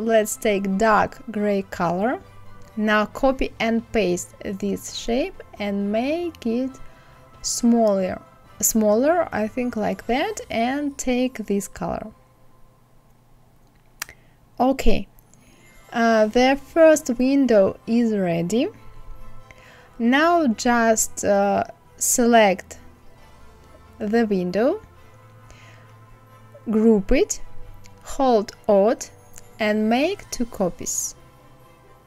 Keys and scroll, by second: 2.6 ctrl+c, 3.4 ctrl+f, 18.0 KP_5, 18.3 KP_0.